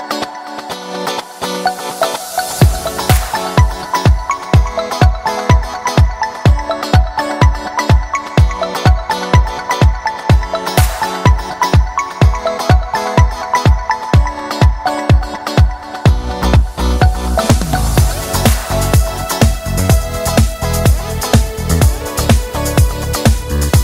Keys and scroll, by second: 1.8 s, 11.4 shift+space, 18.0 space.